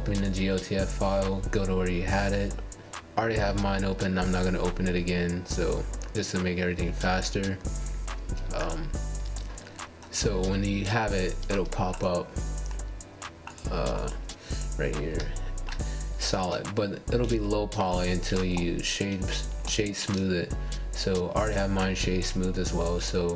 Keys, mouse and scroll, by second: 2.3 scroll up 2, 2.8-3.9 shift+middle drag, 3.9 g, 6.2-6.6 scroll up 3, 6.6-7.0 scroll down 1, 7.0-7.9 scroll up 1, 8.1-10.9 middle drag, 10.9 KP_1, 11.9 KP_7, 12.6 KP_1, 14.0 g, 17.4 KP_1, 18.1 click, 18.4-19.7 middle drag, 19.8 scroll down 1, 20.0-22.5 middle drag, 22.5-23.1 scroll down 1.